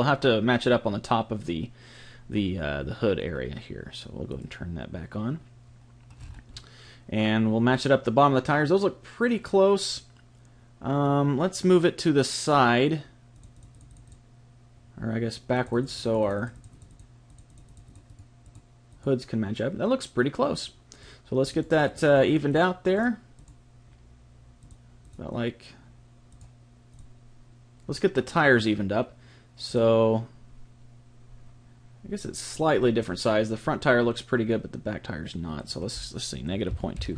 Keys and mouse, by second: 4.3 click, 6.2-11.3 middle drag, 13.3-20.8 drag, 21.0-26.4 drag, 26.9 click, 29.7 click, 35.6 click.